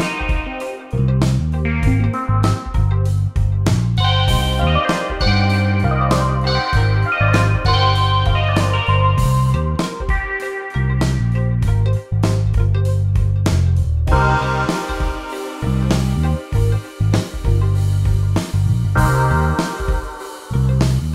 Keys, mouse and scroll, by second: 1.2 Delete, 2.4 click, 2.6 Delete, 3.1 click, 9.0 click, 10.9-12.0 typing, 13.0 click, 18.9 ctrl+Num_Lock, 19.7-20.6 typing.